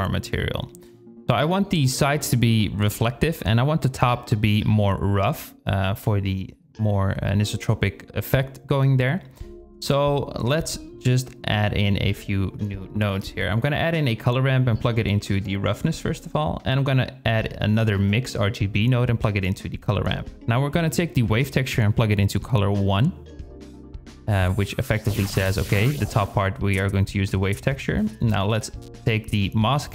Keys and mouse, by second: 3.1 click, 5.2-6.7 drag, 8.9 shift+click, 11.8 shift+a, 13.6-14.6 drag, 16.6 shift+d, 19.3-21.9 drag.